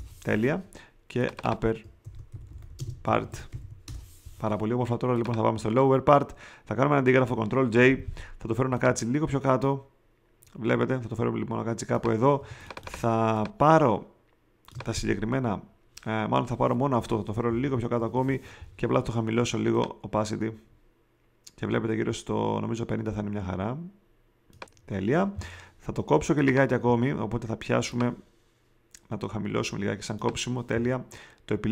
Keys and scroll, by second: 2.0-4.0 typing, 7.6 super+j, 12.3 shift+space, 17.4 shift+Down.